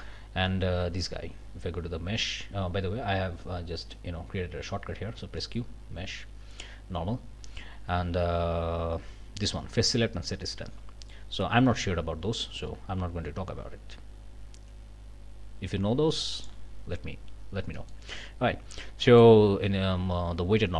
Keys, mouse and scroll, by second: 0.9 q, 3.8 right click, 5.2 q, 12.5 click, 16.3 click, 17.7 click, 19.0 click.